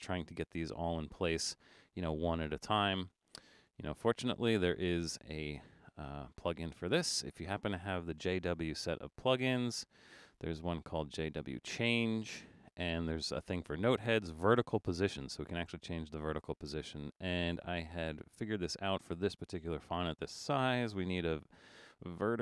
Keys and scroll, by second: 2.8 super+z.